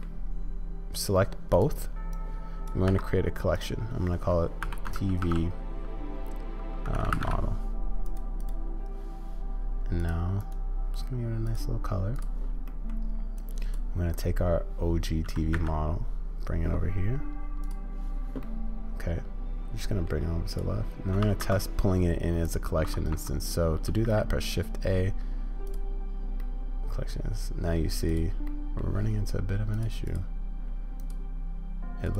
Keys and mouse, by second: 2.1-2.7 drag, 12.6 middle drag, 13.5-18.4 drag, 18.4-20.1 middle drag, 20.5 click, 23.1 Escape, 24.0 shift+a, 26.4-27.8 drag, 28.4-28.8 drag, 29.7 click, 30.0-32.1 drag.